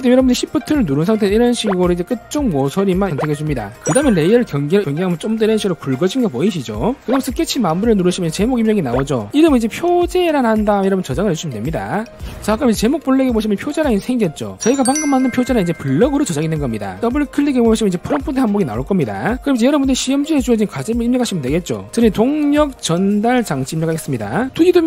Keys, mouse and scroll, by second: 2.2 shift+click, 2.9 shift+click, 3.2 shift+click, 5.4 click, 8.5 click, 9.7-11.6 typing, 17.4 click, 17.6 click, 19.0 click, 22.1-24.6 typing.